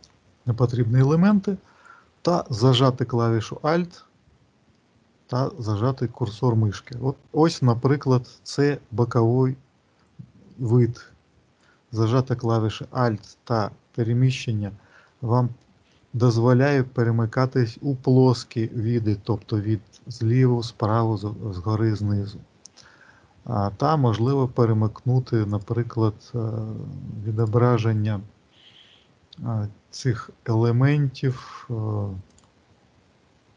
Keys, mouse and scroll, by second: 4.7 alt+middle click, 5.9 alt+middle click, 12.7 alt+middle click, 13.6 alt+middle click, 14.2 alt+middle click, 15.8 alt+middle click, 16.6 alt+middle click, 24.1 click, 25.3 click, 31.2 click.